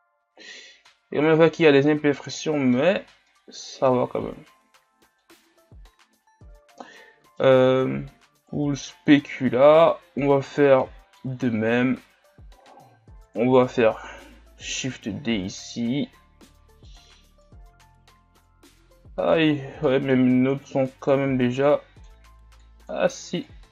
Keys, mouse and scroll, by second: 13.4 click, 14.8 shift+d, 17.4-23.7 drag.